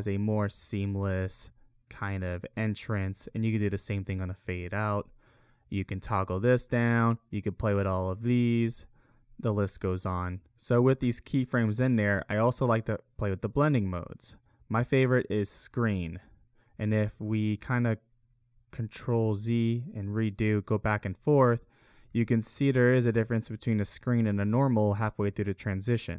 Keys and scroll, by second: 1.4 space, 2.9 space, 8.7 ctrl+z, 18.5 ctrl+z, 19.2 ctrl+shift+z, 21.2 ctrl+z, 22.0 ctrl+shift+z.